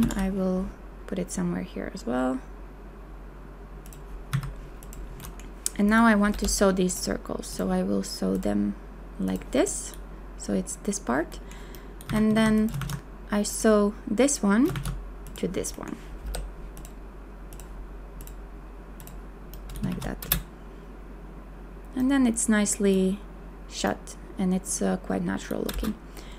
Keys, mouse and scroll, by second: 0.0 ctrl+v, 4.3 a, 6.3 m, 12.1 a, 12.5 q, 14.7 shift+q, 16.3 m, 19.9 shift+w, 20.4 space, 25.7 space.